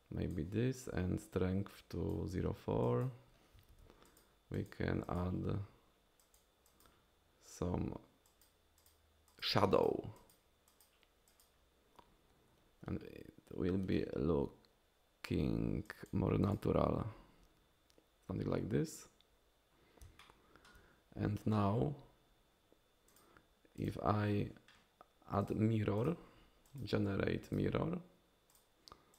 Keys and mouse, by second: 1.3 click, 2.9 click, 3.7 ctrl+z, 4.1 click, 4.5 click, 5.1 click, 6.2 click, 6.7 click, 8.3 click, 8.8 click, 9.3 click, 9.8 click, 10.2 click, 10.7 click, 11.3 click, 15.9 click, 16.4 click, 20.2 shift+middle click, 20.3 shift+click, 20.6 shift+click, 23.1-24.0 drag, 25.5 click, 26.1-27.6 drag, 28.5 click.